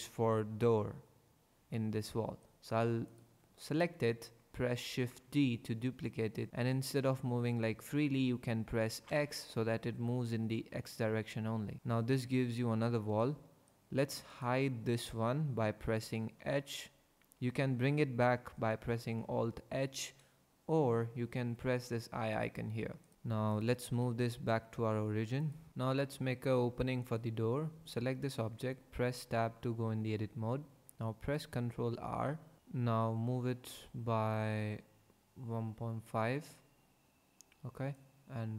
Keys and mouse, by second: 4.9 shift+d, 9.0 x, 16.4 h, 19.0 alt+h, 20.9 h, 22.3 click, 23.0 click, 23.5 click, 23.9 g, 24.1 x, 27.0 click, 28.3 Tab, 31.4 ctrl+r, 37.9 click.